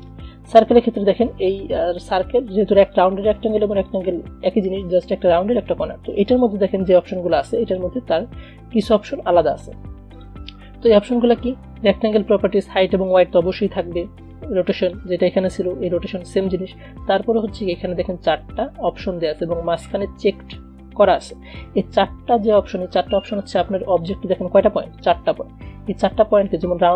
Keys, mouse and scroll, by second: 7.9 click, 10.3 click, 14.9 click, 24.2 click.